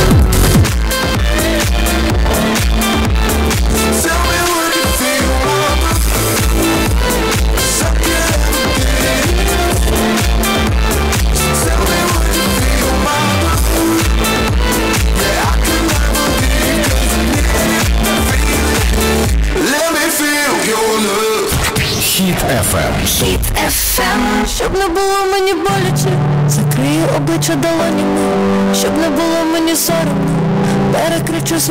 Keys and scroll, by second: 1.3 Page_Down.